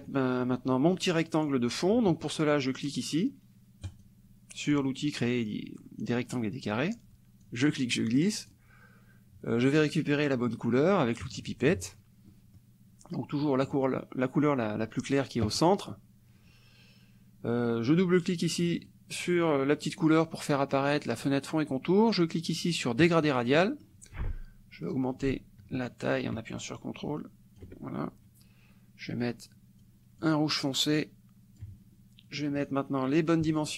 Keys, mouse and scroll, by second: 3.9 click, 7.4-8.7 drag, 11.2 click, 12.3 middle click, 13.8 click, 18.8 click, 23.0 click, 23.6 middle click, 25.1-27.8 ctrl+drag, 29.8-31.8 drag, 32.6 click.